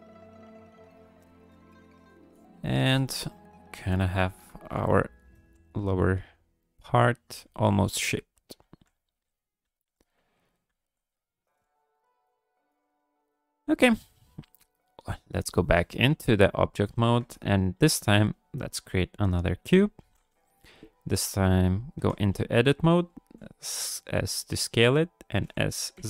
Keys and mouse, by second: 0.4 click, 1.0 shift+click, 1.2 shift+click, 1.5 shift+click, 2.0 shift+click, 2.3 shift+click, 2.5 shift+click, 2.8 shift+click, 3.2 click, 3.5 ctrl+click, 4.3 KP_1, 5.0 ctrl+click, 5.4 g, 5.6 f, 6.2-7.3 drag, 7.4 f, 8.1 click, 8.6 f, 9.2 click, 9.6 f, 10.3 click, 10.7 f, 11.1 click, 11.7 shift+click, 11.9 shift+click, 12.2 shift+click, 12.5 shift+click, 12.7 shift+click, 13.4 ctrl+click, 14.7 click, 15.9 shift+drag, 16.8 ctrl+s, 17.8 shift+a, 20.0 alt+g, 22.0 Tab, 22.6 click, 23.2 s, 24.5 click, 25.4 s.